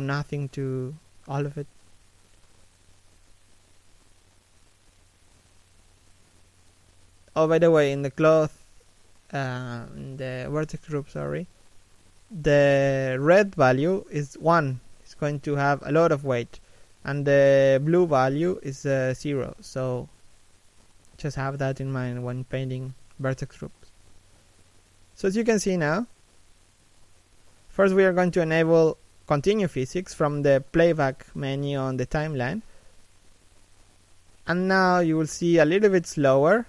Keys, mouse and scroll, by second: 2.1 middle click, 3.2 right click, 6.9 middle click, 7.4-7.9 scroll up 1, 8.2 shift+middle click, 11.8 middle click, 22.6 middle click, 23.4 shift+middle click, 23.8 middle click, 24.4 middle click, 34.3 middle click, 36.2 right click.